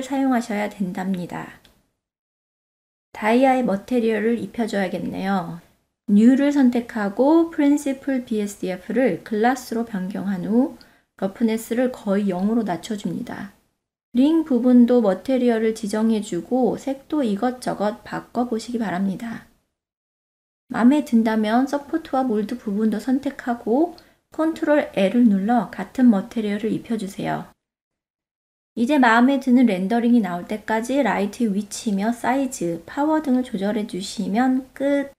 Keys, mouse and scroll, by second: 1.6 click, 2.9 click, 5.8-7.7 drag, 10.3-11.8 drag, 12.8 click, 14.1 ctrl+middle click, 14.6 click, 14.8 ctrl+middle click, 15.6 F6, 15.6-16.1 middle drag, 16.6 click, 17.0 click, 17.3 click, 18.0-18.3 drag, 18.6 click, 19.4 click, 19.7 ctrl+middle click, 19.9 click, 20.0 click, 20.3 shift+click, 20.5 ctrl+l, 21.5 click, 22.7 click, 23.6 click, 24.6 click, 25.4 click, 25.7 shift+click, 25.9 ctrl+l, 26.6 click, 26.9 click, 27.8 alt+click, 28.9-29.5 middle drag, 29.8 shift+middle click, 29.9 click, 30.1 click, 30.8 click, 34.5 click.